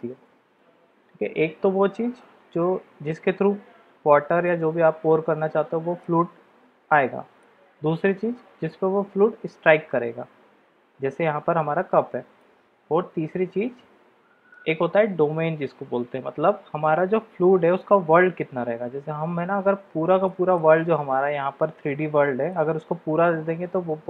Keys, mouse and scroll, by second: 4.4-6.0 middle drag, 6.9-7.4 middle drag, 12.3-14.6 middle drag, 20.2-20.6 middle drag, 22.5-24.0 middle drag.